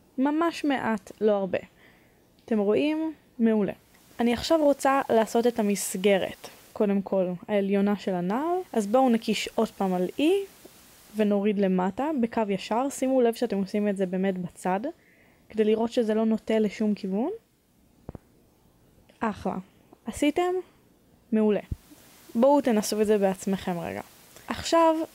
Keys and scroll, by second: 6.6 1, 8.6 3, 9.2 e, 13.7 a, 14.4 b, 19.1 b.